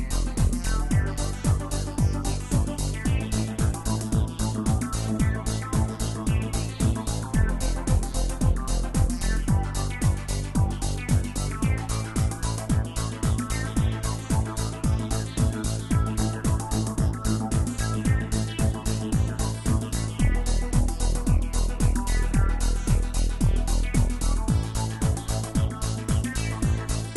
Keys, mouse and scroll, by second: 1.6-4.1 middle drag, 4.1 click, 4.8 n, 5.5 scroll up 1, 6.1-6.7 scroll up 3, 8.6 click, 10.1 click, 11.8 click, 13.2-14.3 drag, 16.6 click, 17.8 scroll down 1, 18.6-22.8 drag, 25.4-27.1 drag.